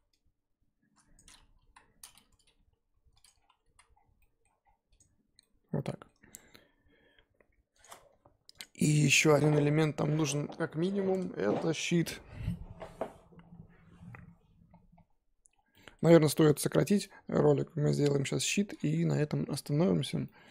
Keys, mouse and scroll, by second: 1.1 click, 1.3-1.6 scroll up 3, 1.6 KP_1, 2.5 g, 3.3 scroll down 4, 3.5 Tab, 3.7 z, 3.9 scroll down 1, 4.2 middle click, 4.6 scroll down 1, 4.9 click, 5.3 scroll down 1, 5.4-15.5 middle drag, 15.5 scroll down 1, 15.7 middle click, 16.0-16.7 scroll up 1, 16.7-18.0 shift+middle drag, 18.0 click.